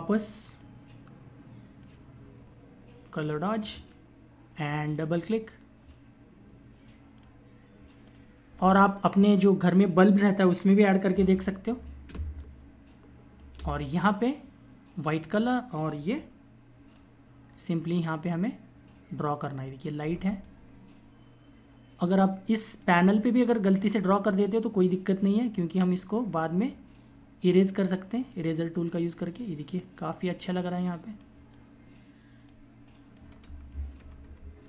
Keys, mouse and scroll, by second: 0.4 click, 6.4 click, 11.2 ctrl+=, 11.6 click, 11.7 space, 16.6 click, 19.9 [, 20.3 click, 33.6 ctrl+-.